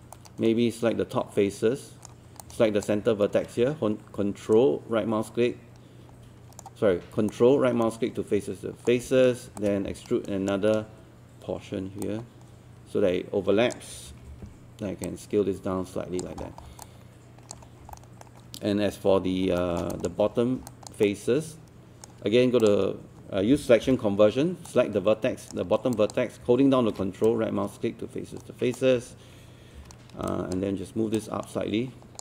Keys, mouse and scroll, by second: 0.1-2.4 right drag, 2.4 click, 4.5-7.1 shift+right drag, 7.3 ctrl+right click, 9.6-11.1 shift+right drag, 12.1-14.1 drag, 15.1 click, 16.5 scroll down 1, 16.9 alt+click, 17.7 scroll up 1, 17.9 alt+middle click, 18.6-19.1 scroll up 1, 19.6 alt+middle click, 19.9 alt+click, 20.7 alt+click, 21.1 right click, 22.6 click, 23.9 q, 24.7 right click, 25.9 click, 27.3 ctrl+right click, 29.8 ctrl+w, 30.3 alt+click.